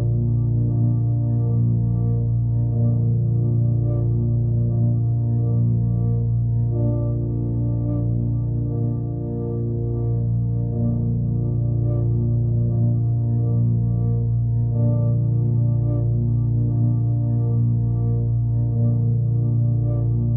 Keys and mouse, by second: 2.5 click, 4.4-5.8 drag, 6.5-7.6 drag, 8.3 click, 9.3 click, 10.5 click, 11.6-12.7 drag, 14.0-15.6 drag, 16.3-17.2 drag, 17.5 drag, 18.2 click.